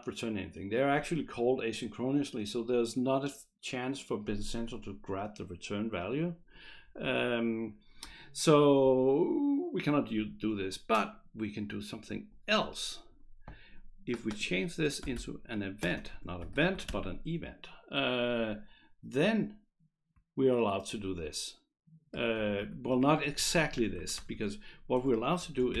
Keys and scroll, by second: 14.7-17.4 typing, 18.4 Escape, 19.3 Right, 19.7 Right, 19.8 Right, 22.2 Right, 22.4 Right, 22.6 Right, 22.9 BackSpace, 24.0 Right, 24.2 BackSpace, 25.7-25.8 typing.